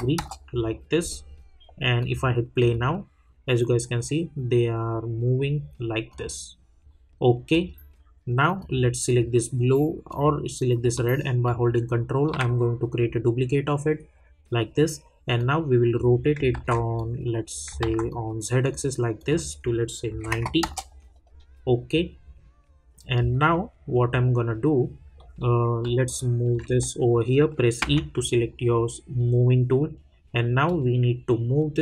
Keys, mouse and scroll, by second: 0.1 Return, 2.0 click, 6.1 click, 8.6 click, 11.4-14.6 ctrl+drag, 15.3 click, 16.5 ctrl+z, 16.9 click, 17.8 ctrl+z, 18.1 click, 20.6 Return, 23.3 middle click, 26.1-27.8 alt+drag, 27.8 e, 30.6-31.8 drag.